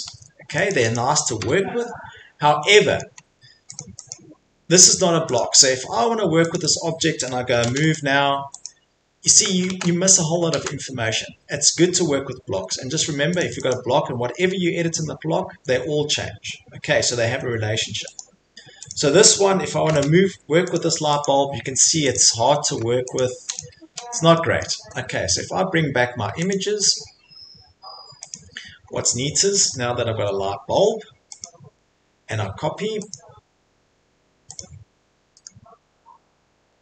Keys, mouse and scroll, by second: 0.7 click, 0.9 click, 1.4 Delete, 1.8 middle click, 2.1-2.5 scroll, 3.0-3.4 scroll, 3.8 click, 3.8 middle click, 4.1 click, 4.3 Escape, 4.5 Escape, 4.8 click, 5.4 click, 5.7 middle click, 5.9 Escape, 5.9 middle click, 6.6 click, 6.7 click, 7.6 m, 7.9 click, 8.6 click, 9.0 Escape, 9.4 middle click, 9.7 ctrl+z, 10.5 ctrl+z, 12.2 middle click, 12.4 middle click, 12.5 Escape, 12.8 middle click, 13.4 right click, 13.7 right click, 15.1 middle click, 15.1 click, 15.4 middle click, 15.5 Escape, 16.2 middle click, 18.2 click, 18.9 click, 19.8 m, 20.7 click, 21.2 click, 21.5 Escape, 21.9 click, 22.1 click, 22.4 Escape, 22.5 middle click, 22.6 middle click, 22.8 Escape, 23.1 click, 23.5 click, 23.9 Delete, 24.6 middle click, 26.5 click, 28.3 click, 28.9 middle click, 29.0 middle click, 29.7 middle click, 30.0 Escape, 30.1 Escape, 31.4 click, 33.1 click, 34.6 click, 34.8 middle click, 34.9 middle click, 35.5 middle click, 35.9-36.8 scroll.